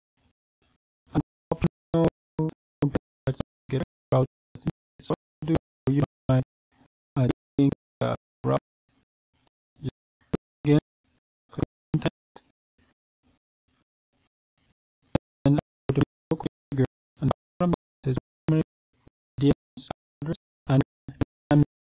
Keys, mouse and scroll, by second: 6.7 click, 9.2 click, 10.7-11.2 scroll down 2, 11.4-12.4 scroll down 2, 15.5-16.0 scroll down 2.